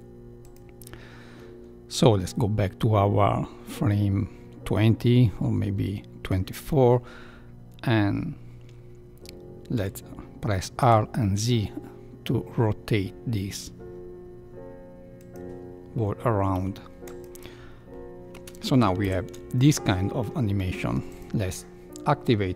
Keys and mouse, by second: 0.4 click, 1.9-6.2 drag, 9.7 r, 16.5 i, 17.9 Left, 17.9 space, 18.3 space, 19.0 shift+Left, 21.1 click.